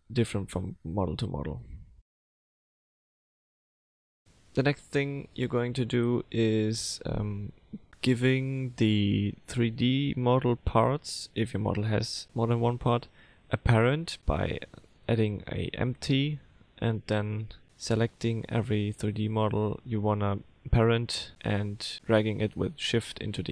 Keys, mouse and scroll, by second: 0.0 middle click, 3.4 click, 4.1 click, 4.8 F3, 9.6 middle click, 10.0 ctrl+z, 10.0 click, 11.5 click, 13.1 click, 13.5 ctrl+click, 13.9 click, 14.2 ctrl+click, 14.9 click, 16.8 click, 17.3 click, 17.4 click, 21.2 middle click, 22.6 middle click, 23.2 r.